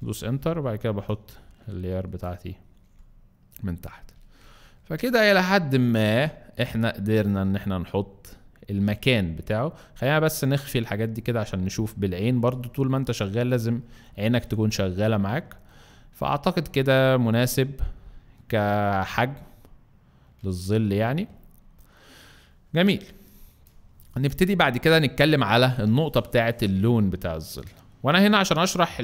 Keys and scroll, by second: 0.1 Return, 6.6 alt+space, 7.9 alt+space, 23.1 alt+space, 23.7 alt+space.